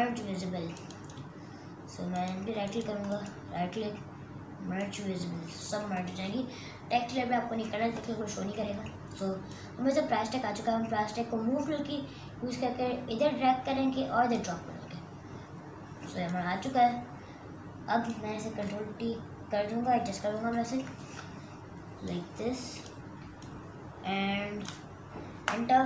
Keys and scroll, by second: 20.3 ctrl+t, 25.3 Return.